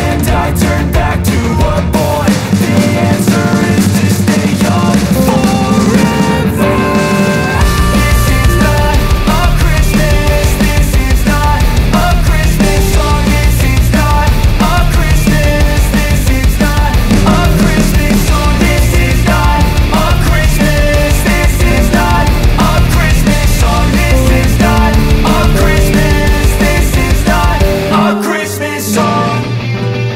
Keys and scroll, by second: 0.3 shift+F2, 0.8 Escape, 1.8 shift+Page_Down, 24.6 3, 24.8 KP_Decimal, 25.0 5.